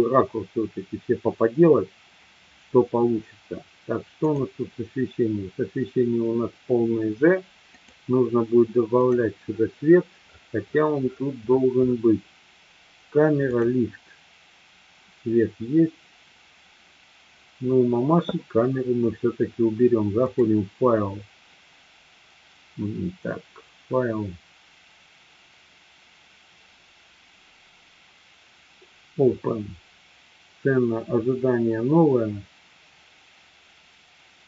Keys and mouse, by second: 4.3 click, 7.7 click, 9.1 click, 13.4 click, 20.2-34.4 drag.